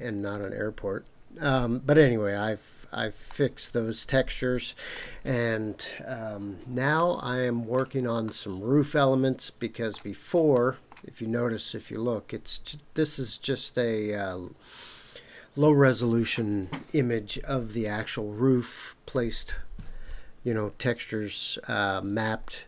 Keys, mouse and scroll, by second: 1.2 scroll down 1, 2.5-3.2 scroll down 2, 3.2-5.0 middle drag, 6.9-7.8 shift+middle drag, 8.2-9.9 shift+middle drag, 10.5-10.9 middle drag.